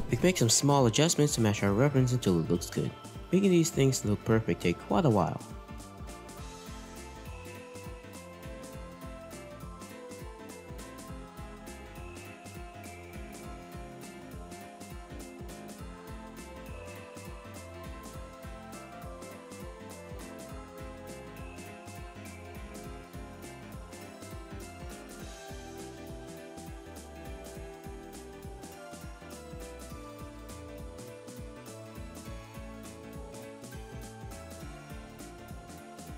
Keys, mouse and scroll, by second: 1.6 r, 8.3 r, 15.9-16.5 scroll down 4, 16.7-17.6 scroll down 2, 17.0-17.6 scroll up 1, 17.6-18.0 scroll up 4, 18.6-19.4 scroll up 1, 20.1 scroll down 2, 20.1 middle click, 20.5-21.1 scroll up 1, 21.1 r, 22.1 r, 30.2-30.8 scroll down 3, 30.8-32.0 scroll up 4, 32.0 scroll up 1, 33.0-33.4 scroll up 1, 33.0 r, 33.4 middle click.